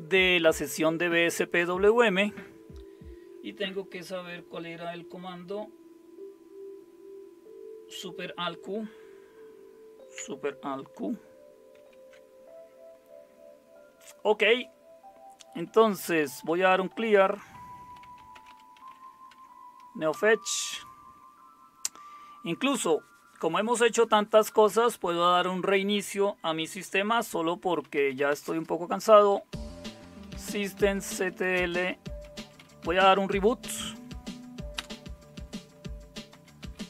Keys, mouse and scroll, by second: 11.8 alt+super+q, 15.8-19.4 typing, 20.1 Return, 27.6-33.6 typing, 34.8 Return, 36.1-36.8 typing.